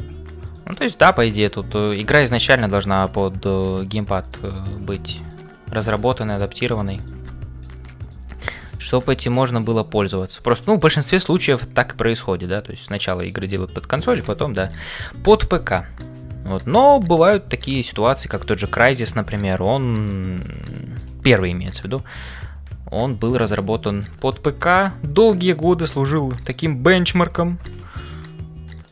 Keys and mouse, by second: 0.0-28.9 typing, 0.8 middle click, 1.3 click, 1.7 middle click, 3.2 middle click, 4.2 click, 7.2 middle click, 9.1 middle click, 10.1 shift+middle click, 10.5 middle click, 13.1 shift+middle click, 13.5-16.2 middle drag, 17.4 middle click, 18.6-20.2 middle drag, 20.7 shift+middle click.